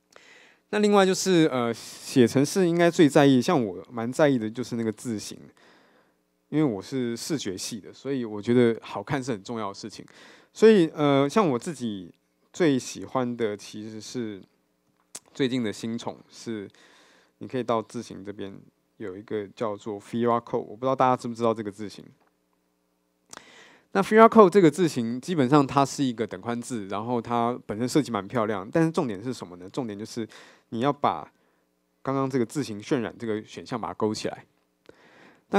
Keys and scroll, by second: 4.0 super+1.